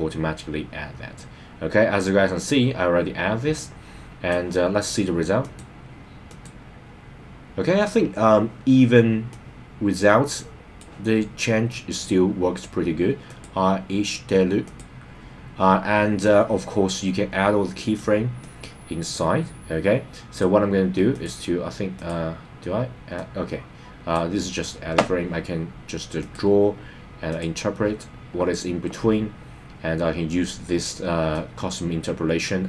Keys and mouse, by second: 5.4 click, 6.3 click, 9.3-10.8 drag, 13.2 click, 14.6 click, 16.2-17.9 drag, 18.4-20.5 drag, 21.1 click, 21.9 click, 23.1-24.2 drag, 26.3-27.4 drag, 31.3-32.6 drag.